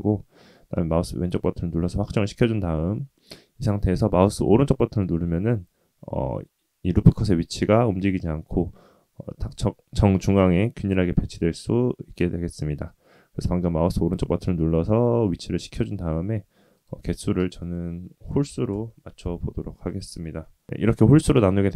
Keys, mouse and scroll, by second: 15.7 click, 16.7-18.8 drag, 19.8 click.